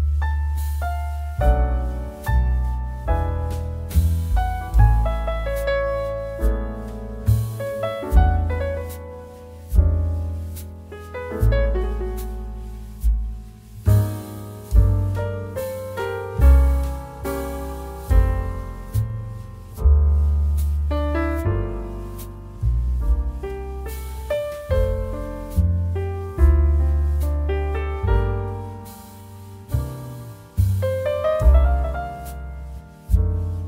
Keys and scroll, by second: 20.0-20.6 typing, 29.2 1.